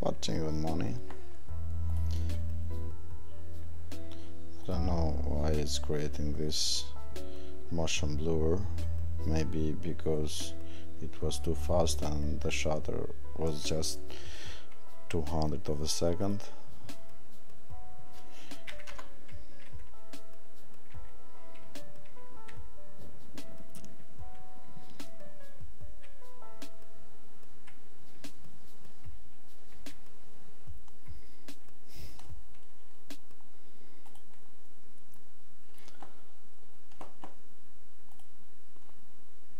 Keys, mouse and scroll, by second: 1.9 click, 4.6 click, 16.3 click.